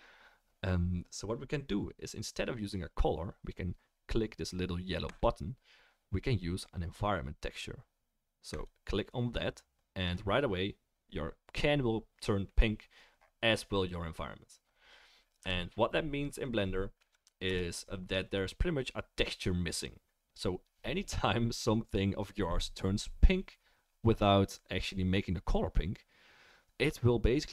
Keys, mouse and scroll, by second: 5.1-18.2 middle drag, 15.4 Right, 17.4 KP_0.